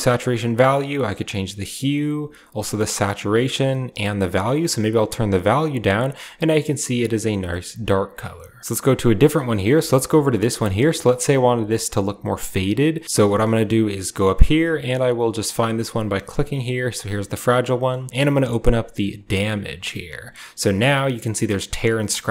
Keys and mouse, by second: 0.8 click, 2.0-3.1 drag, 3.8-6.0 shift+drag, 7.0 click, 7.3 shift+click, 8.6-9.1 drag, 9.3 drag, 9.7 shift+middle click, 11.0 shift+click, 12.1 shift+click, 15.6 click, 17.7 shift+click, 19.0 click.